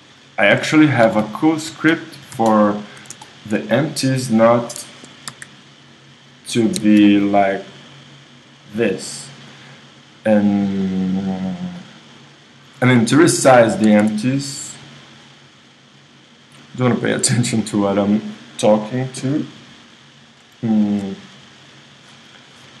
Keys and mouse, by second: 1.1 g, 4.1-5.9 drag, 5.3 KP_1, 5.8 middle click, 6.4-8.2 drag, 6.8 Escape, 8.5 right click, 10.8-12.6 drag, 13.9 a, 14.0 a, 18.9-20.7 drag, 20.7 middle click, 21.3-22.8 right drag.